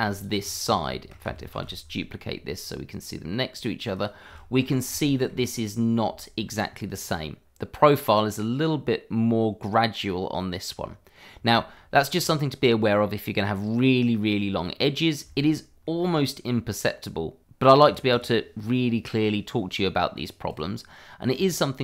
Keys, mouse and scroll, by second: 0.1 click, 0.3-0.7 scroll down 1, 0.9 shift+middle click, 2.1 shift+d, 3.9 click, 4.2-4.5 scroll up 1, 5.0-6.0 scroll up 2, 6.1 shift+middle click, 6.2 middle click, 6.3 shift+middle click, 10.8-11.4 scroll down 1, 11.6 shift+middle click, 12.1-14.2 scroll down 1, 14.7-15.2 scroll up 1, 15.3 shift+middle click, 15.4 middle click, 15.5 shift+middle click, 15.9-17.5 shift+scroll up 1, 17.5-17.9 scroll down 1, 17.9 click, 19.1 double click, 20.4 scroll up 1, 20.6 click, 21.3 Tab.